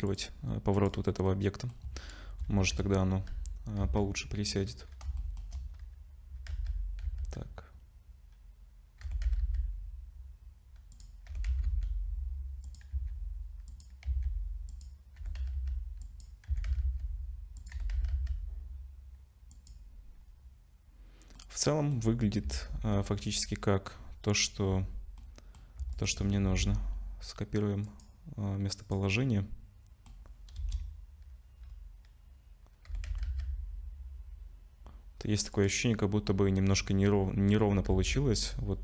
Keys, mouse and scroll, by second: 0.7 click, 1.3 middle click, 2.7 z, 4.0 z, 5.2 shift+middle click, 5.7-6.5 scroll up 2, 6.5 z, 7.0 z, 9.0 r, 11.3 r, 12.9 s, 14.1 s, 15.2 g, 16.5 s, 17.7 g, 21.4 middle click, 22.0-22.4 scroll down 4, 22.4 z, 22.9 middle click, 25.2 middle click, 25.9 shift+click, 26.4 ctrl+c, 28.8 click, 29.2 middle click, 30.6 KP_0, 31.6 scroll down 4, 32.9 r, 37.9 z.